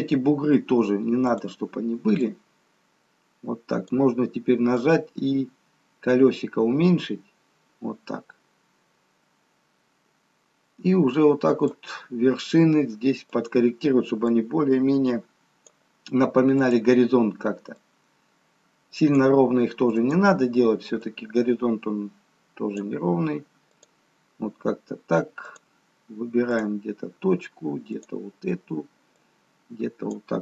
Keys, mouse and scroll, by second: 1.3 click, 2.5 click, 13.5 click, 14.6 click, 18.0 click, 20.1 click, 23.9 click, 25.7 click, 26.6 click, 28.3 click, 29.4 click.